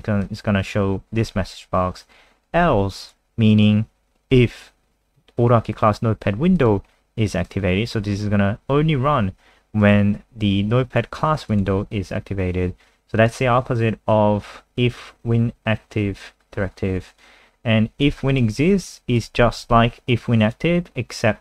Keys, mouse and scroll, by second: 14.8-15.4 scroll down 2, 16.4 scroll down 1, 17.2 click, 18.2 ctrl+c, 18.3 click, 18.5 click, 19.3 ctrl+v, 19.6 ctrl+s, 20.1 click.